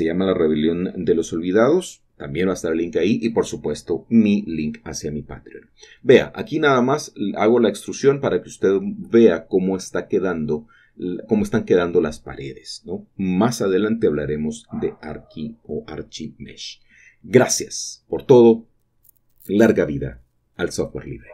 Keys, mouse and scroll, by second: 0.8 typing, 8.5 click, 8.9-10.6 middle drag, 9.3 typing, 11.0 middle click, 11.2 typing, 13.6 ctrl+middle click, 13.8 typing, 15.5-16.5 typing, 19.4-21.1 drag.